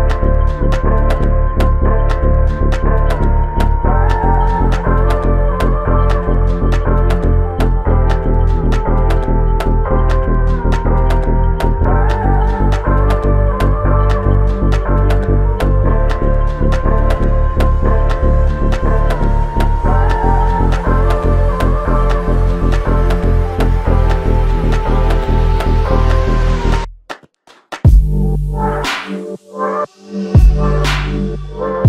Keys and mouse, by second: 0.6 alt+click, 1.4 shift+click, 3.3 alt+shift+click, 4.4 f, 5.6 alt+click, 8.8 double click, 12.8 alt+click, 14.4 alt+click, 15.6 f, 17.2 double click, 19.3 shift+click, 20.5 alt+click, 21.8 alt+shift+click, 22.6 ctrl+alt+click, 27.1 f, 31.1 double click.